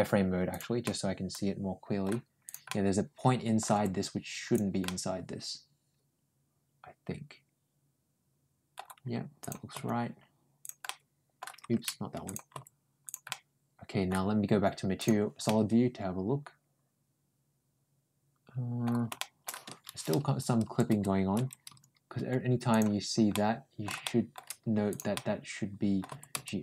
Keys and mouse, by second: 0.3 click, 0.7-1.9 middle drag, 2.3 click, 2.5 middle click, 3.6 g, 4.7-8.6 middle drag, 9.2 click, 9.6 g, 10.7 middle click, 12.1 click, 12.4 ctrl+g, 13.1 middle click, 14.8 click, 15.3-18.7 middle drag, 19.0 shift+middle click, 23.1 shift+middle click, 23.9 shift+middle click, 24.7 click, 25.0 middle click, 25.9 g.